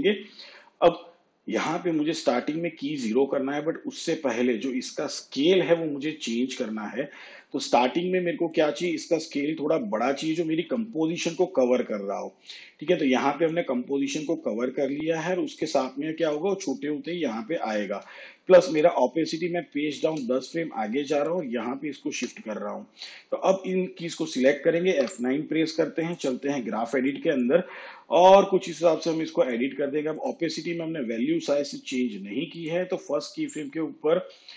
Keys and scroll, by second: 19.6 shift+Page_Down, 25.0 F9.